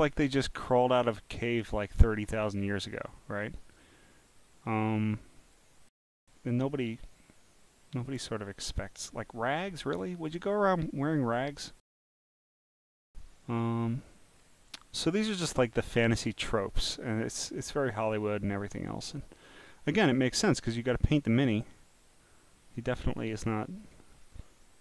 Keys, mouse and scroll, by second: 0.1 scroll up 1, 0.8 click, 1.6-3.4 drag, 4.3-5.5 drag, 8.1 click, 9.6 click, 10.7 click, 11.1 scroll down 5, 12.1 scroll down 3, 14.4 scroll down 1, 14.4 scroll down 1, 14.5 scroll down 1, 15.4 scroll down 1, 15.4 scroll, 16.3-17.0 scroll down 5, 17.9 scroll, 19.4 scroll, 20.1 scroll up 5, 21.5 click, 23.2 click.